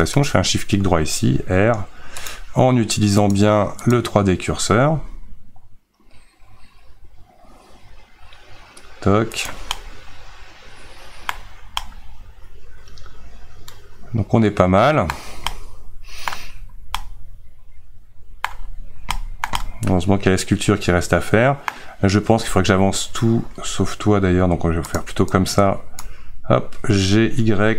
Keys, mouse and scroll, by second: 0.1 shift+right click, 1.2 r, 3.9-4.9 drag, 4.9 r, 9.8-11.5 middle drag, 11.5-11.8 scroll down 2, 11.8-14.8 middle drag, 15.1-15.5 scroll down 2, 15.5-16.5 middle drag, 16.5-17.0 scroll up 1, 17.0-18.6 middle drag, 18.6-19.2 scroll down 1, 19.2-22.4 shift+middle drag, 22.4 a, 25.0 click, 26.0 click, 27.1 g.